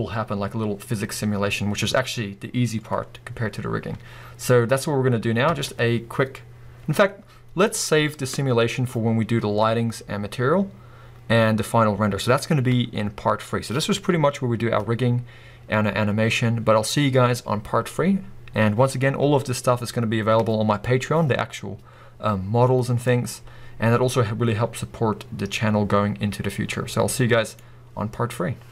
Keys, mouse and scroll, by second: 5.5 space, 23.0-28.7 middle drag.